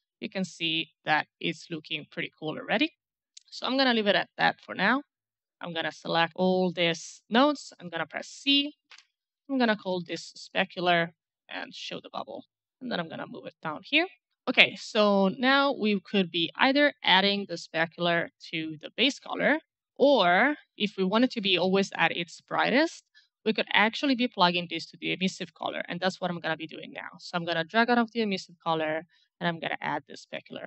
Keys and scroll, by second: 8.1-10.3 typing.